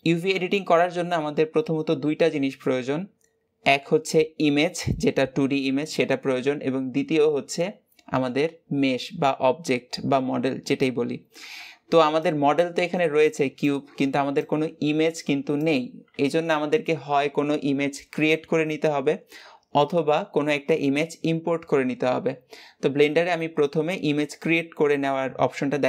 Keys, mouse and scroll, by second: 0.3 Tab.